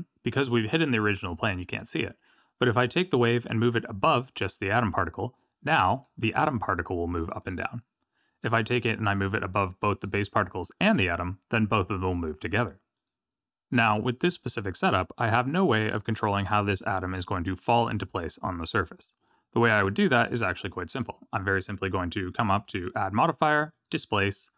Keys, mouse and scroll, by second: 1.9 click, 3.5 click, 5.9 click, 7.4 click, 9.1 click, 12.9 click, 13.5 click, 20.6 click, 22.3 click.